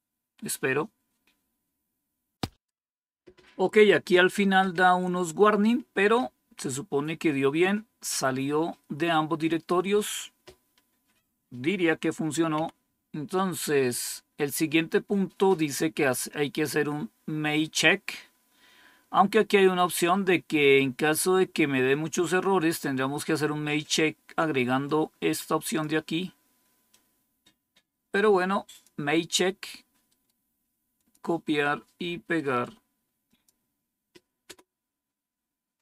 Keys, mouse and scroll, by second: 12.4 Down, 13.9-15.4 scroll up 1, 15.4 scroll down 1, 18.6 scroll down 1, 24.8-25.8 drag, 26.8-28.8 drag, 30.0 right click, 30.9 click, 32.3 right click, 33.2 click, 34.4 Return.